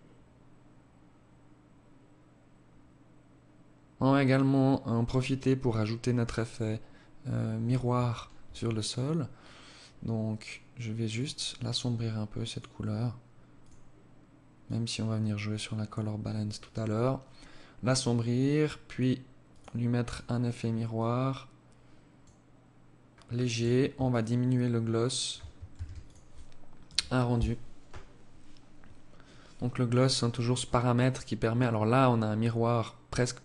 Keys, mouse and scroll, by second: 6.9 Escape, 7.8 right click, 10.1 click, 11.5 click, 12.5 click, 16.5-17.1 scroll down 1, 17.1-18.5 scroll down 4, 18.5 click, 18.5 scroll down 1, 18.9 click, 19.9 click, 23.0 shift+click, 24.7 ctrl+s.